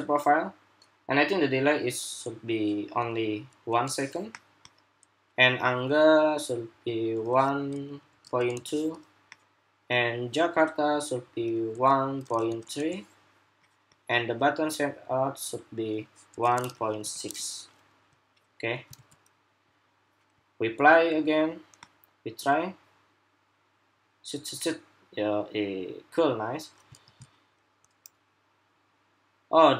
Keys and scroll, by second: 18.7 super+s, 26.7 super+r.